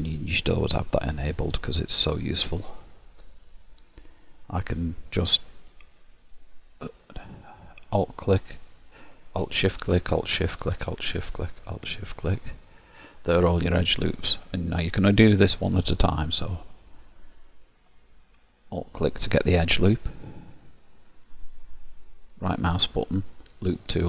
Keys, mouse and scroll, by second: 5.8 alt+click, 8.0 alt+shift+click, 9.7 alt+shift+click, 10.7 alt+shift+click, 11.8 alt+shift+click, 12.6 middle click, 16.5 alt+click, 22.4 right click.